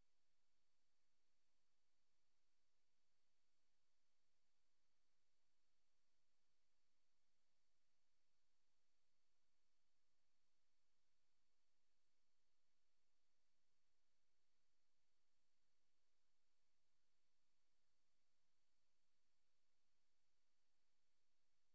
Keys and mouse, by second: 0.0-2.3 drag, 2.9 click, 4.9 click, 5.3 click, 10.3 click, 11.1 click, 11.6 click, 12.1 click, 13.3 click, 14.2-15.4 drag, 19.7 click, 20.6 click.